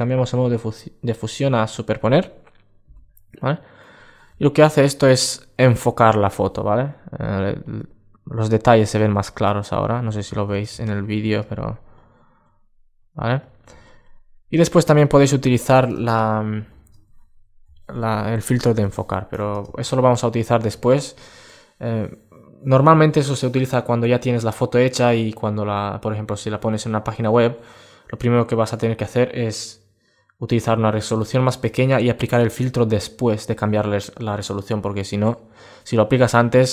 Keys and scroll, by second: 4.8 super+space, 9.9 super+1, 13.6 alt+space.